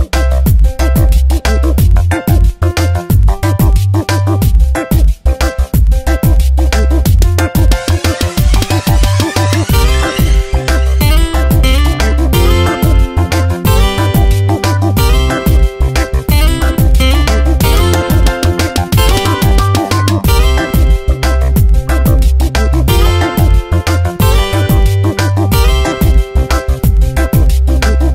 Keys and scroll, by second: 0.1 ctrl+z, 3.4 space, 4.0 v, 4.9 Tab, 7.3 ctrl+z, 9.4 ctrl+z, 10.7 ctrl+t, 15.1 Return, 21.1 3, 25.4 Tab.